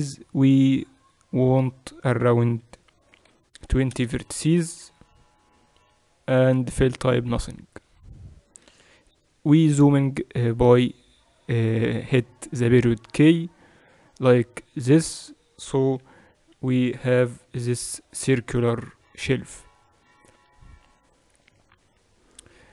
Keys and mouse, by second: 10.7 KP_Decimal, 15.9-17.5 typing, 21.4 KP_1.